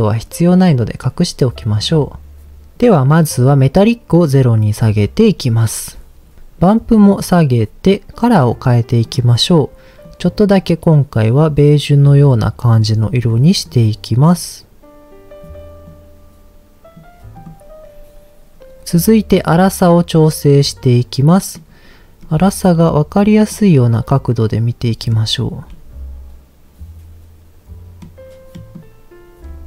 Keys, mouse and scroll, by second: 0.4 scroll down 1, 1.8 click, 4.1 click, 6.4 ctrl+z, 7.0 click, 9.0 click, 13.2 click, 13.6 click, 17.3 click, 20.2-21.6 middle drag, 22.2 middle click, 23.4-25.0 middle drag, 25.7-28.0 middle drag, 28.5 middle click, 29.4 scroll up 2.